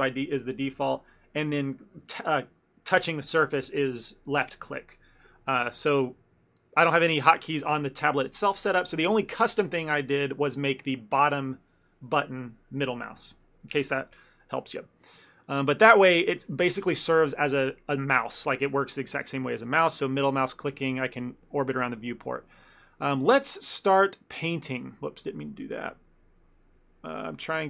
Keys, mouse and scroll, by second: 15.3 middle click, 16.3 ctrl+middle click, 20.0 ctrl+middle click, 20.4 middle click, 20.8 ctrl+middle click, 21.1 middle click, 21.4 ctrl+middle click, 22.4 shift+middle click, 22.7 ctrl+middle click, 23.6 click, 24.9 ctrl+z, 27.1 click.